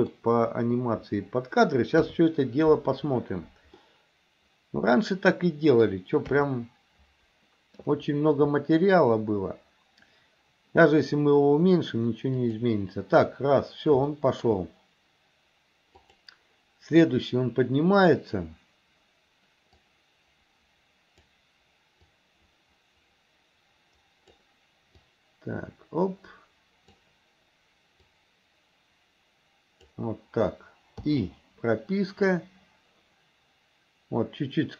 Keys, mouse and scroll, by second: 2.0 KP_3, 3.8-5.8 middle drag, 6.3 KP_3, 12.5 click, 14.1 shift+middle click, 16.1 click, 19.8-21.3 drag, 22.2-24.4 drag, 25.1-27.1 drag, 28.1-30.0 drag, 32.3 click.